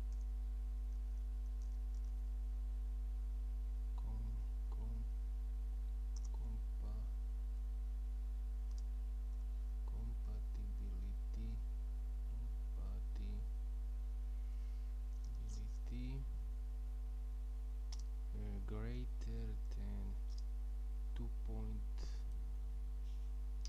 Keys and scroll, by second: 0.0-2.6 typing, 4.4-7.6 typing, 8.7-12.0 typing, 14.5-15.2 typing, 16.4-20.9 typing.